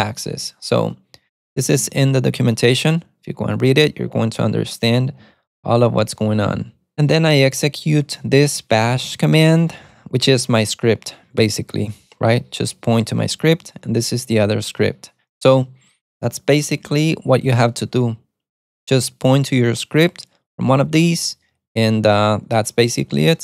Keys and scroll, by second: 1.9 Escape, 2.7 super+Tab, 8.1-10.4 typing, 12.7-15.0 typing.